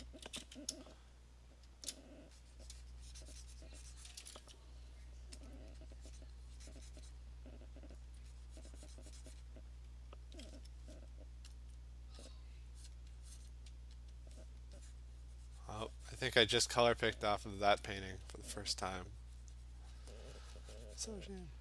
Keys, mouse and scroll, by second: 1.7 !, 2.5 click, 2.6 click, 2.6 alt+click, 3.7 click, 4.2 click, 5.5 alt+click, 5.7 alt+click, 6.2 click, 6.6 click, 7.0 click, 7.1 click, 7.6 alt+click, 8.1 alt+click, 9.4 click, 11.6 alt+click, 12.3 click, 12.9 click, 13.0 alt+click, 13.5 click, 14.2 alt+click, 15.1 click, 17.4 click, 18.0 alt+click, 18.4 click, 18.8 alt+click, 19.3 click, 20.1 click, 20.2 alt+click, 21.2 click.